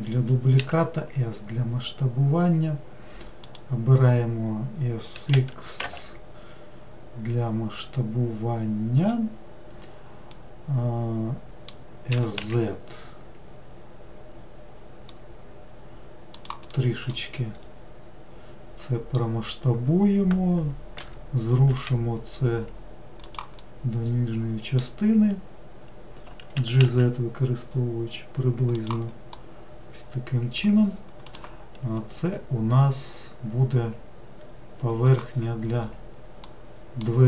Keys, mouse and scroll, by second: 5.2 s, 10.4-12.2 middle drag, 12.2 s, 16.8 middle click, 17.6-21.0 scroll up 2, 21.0 g, 23.6-26.6 middle drag, 26.6 g, 29.4-32.5 middle drag, 36.5-37.2 middle drag.